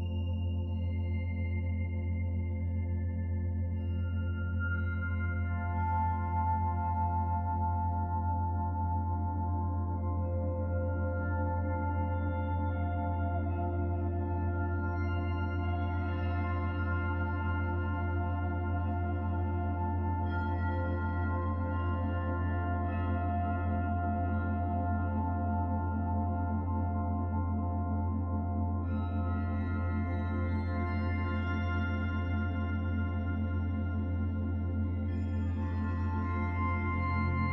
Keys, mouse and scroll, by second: 4.0 middle click, 7.3 middle click, 8.8 click, 11.0 r, 13.5 click, 15.6 s, 19.0 click, 21.9 click, 24.7 middle click, 28.9-29.5 scroll up 2, 29.5 middle click, 30.4 middle click, 31.1 shift+middle click, 31.5 middle click, 32.5 middle click, 35.3 click.